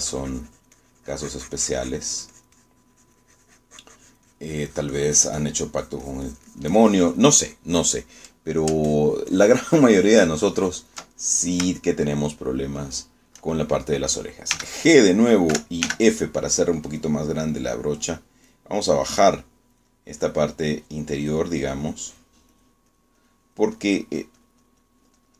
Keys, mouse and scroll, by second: 9.9-12.1 ctrl+drag, 12.3 ctrl+middle click, 12.9 shift+middle click, 13.5 shift+middle click, 15.6 g, 16.6 g, 16.9 f, 17.9 click, 18.7 click, 19.6 click, 20.1 click, 20.7 click, 21.3 click, 21.9 click, 22.3 click, 22.7 click, 23.1 click, 23.6 click, 24.0 click.